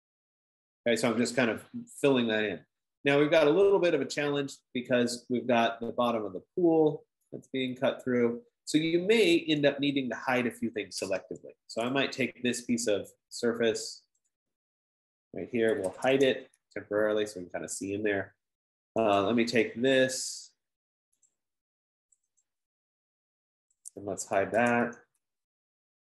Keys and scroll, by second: 3.3 typing, 6.8 F15, 11.7 Escape, 15.9-17.1 typing, 24.5-25.7 typing.